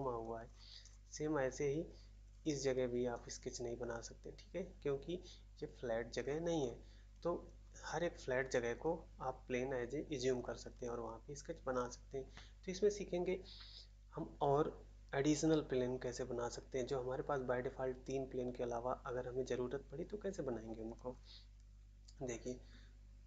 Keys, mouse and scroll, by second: 0.4 scroll down 1, 1.9-2.3 scroll up 1, 2.3-2.6 scroll down 1, 3.1-3.8 scroll up 1, 6.2 scroll up 1, 7.6 scroll down 1, 8.8-9.4 scroll up 1, 10.3-10.7 scroll up 1, 10.7 scroll down 1, 21.1-21.8 scroll up 1.